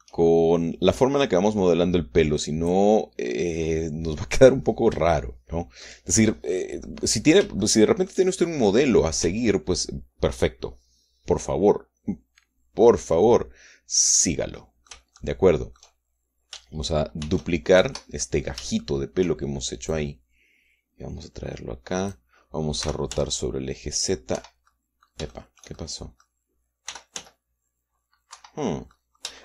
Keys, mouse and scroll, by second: 0.2 shift+scroll up 1, 0.6 shift+middle click, 1.7-3.7 drag, 4.9 scroll down 2, 5.1 middle click, 6.0 shift+middle click, 6.9 shift+scroll up 2, 7.6-9.0 middle drag, 10.0 Tab, 15.3 middle click, 15.9 shift+click, 18.0 shift+d, 18.5 shift+Escape, 19.2 shift+click, 20.7-23.1 drag, 23.6 r, 23.9 z, 25.1 Escape, 25.5 click, 26.1-27.2 shift+drag, 27.7 r, 27.9 z, 29.1 Escape.